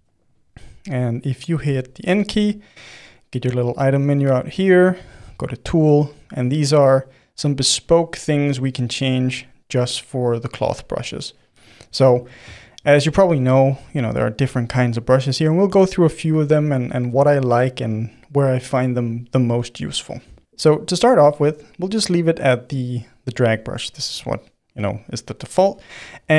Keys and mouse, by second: 1.6 n, 12.0-26.2 middle drag, 26.2 f.